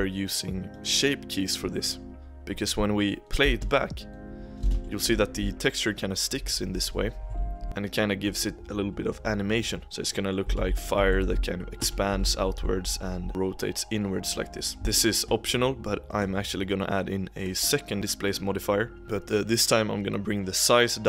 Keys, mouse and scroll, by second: 0.8 click, 3.0-3.4 drag, 3.4 space, 4.6 space, 4.8 Right, 5.0 Right, 6.4 Right, 6.6 Right, 6.8 Right, 7.0 Right, 7.2 Right, 7.4 Right, 7.6 Right, 7.6-10.0 middle drag, 10.0 scroll down 2, 10.1 middle click, 10.3 scroll up 1, 10.4 Left, 10.7-11.2 Left, 11.3 Left, 11.5 Left, 11.7 Left, 12.0 Right, 12.2 Right, 12.4 Right, 12.5 Right, 12.7-13.3 Right, 14.8 space, 14.9-16.0 shift+middle drag, 16.0-17.9 drag, 19.0-20.1 drag.